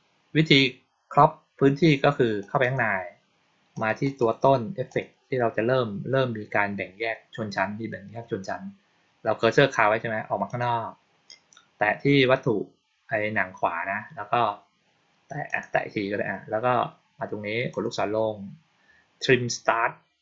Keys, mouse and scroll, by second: 2.3 click, 2.5 click, 3.6 click, 3.9 right click, 4.8 click, 10.4 click, 15.4 click, 17.6 click.